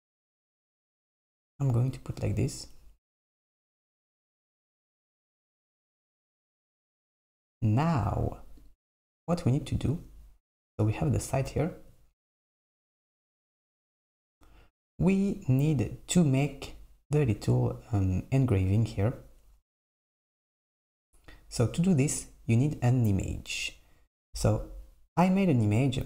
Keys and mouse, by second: 0.8 Tab, 5.9 click, 6.9 s, 7.9 click.